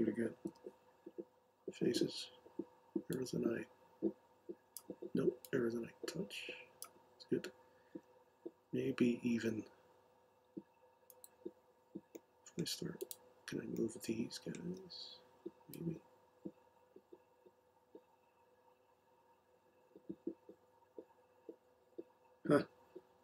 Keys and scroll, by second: 0.4 m.